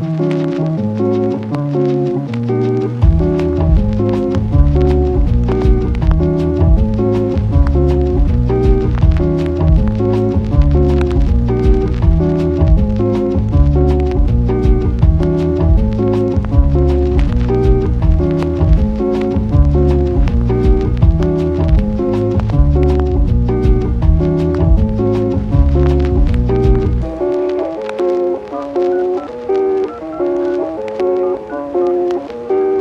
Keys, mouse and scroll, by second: 0.2 Tab, 0.6 click, 1.7 click, 2.4 click, 2.8 click, 3.1 Tab, 4.5 right click, 5.5 right click, 5.9 middle click, 7.6 f, 8.5 f, 8.9 ctrl+click, 9.2 ctrl+click, 9.8 f, 10.5 a, 11.5 e, 11.9 ctrl+z, 12.0 ctrl+z, 12.4 click, 13.1 shift+click, 13.4 shift+click, 14.0 e, 14.9 click, 15.1 middle click, 15.9 middle click, 17.4-19.0 typing, 18.2 ctrl+z, 19.2 click, 19.7 middle click, 21.7 Tab, 23.3 i, 23.9 middle click, 24.6 g, 24.8 y, 26.6 i, 27.4 g, 27.5 y, 27.9 click, 29.2 g, 29.3 y, 29.6 click, 30.7 Tab, 31.7-32.8 typing.